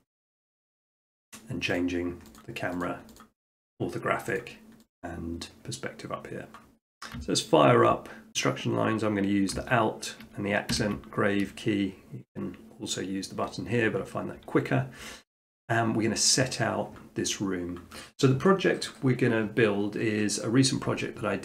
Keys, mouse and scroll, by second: 1.8 click, 2.8 click, 4.4 click, 6.7 middle click, 9.5 shift+middle click, 10.7 alt+`.